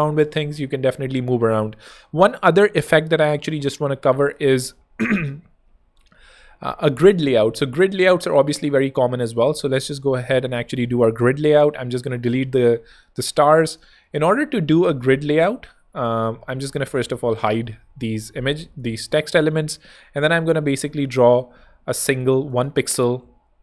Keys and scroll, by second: 4.5 super+d, 6.1 super+z, 6.7 z, 7.5 super+x, 8.0 super+z, 11.4 BackSpace, 12.0 space, 13.5 space, 13.9 alt+z, 17.2 shift+super+h, 17.8 alt+shift+super+h, 19.4 r, 22.3 z, 22.9 super+z.